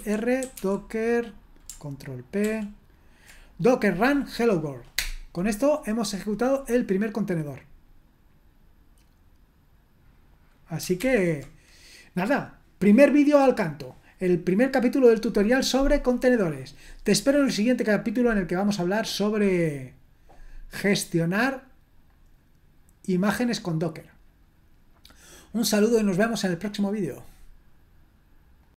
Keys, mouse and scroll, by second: 0.2-3.8 typing, 2.4 ctrl+p, 4.9 Return, 11.0 ctrl+l, 19.1-20.9 scroll down 1, 20.9-22.1 scroll down 1, 22.1-28.6 scroll up 2, 28.6 click.